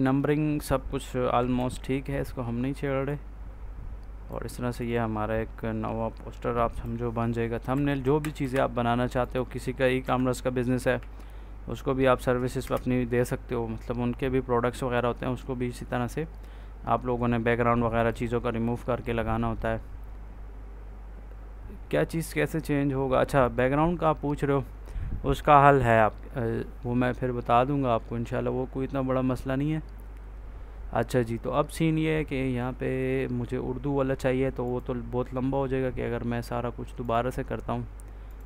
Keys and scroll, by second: 1.4 ctrl+a, 7.6 Up, 7.9 Right, 8.3 Down, 9.9 F4, 10.8 ctrl+s, 12.5 Return.